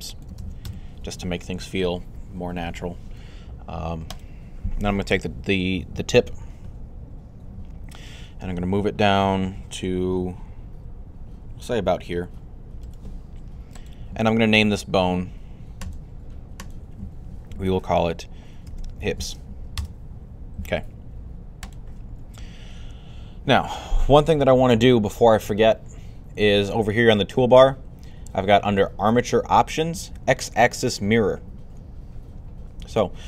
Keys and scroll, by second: 0.3-1.0 typing, 5.9 1, 8.1-8.9 typing, 18.2-19.4 typing.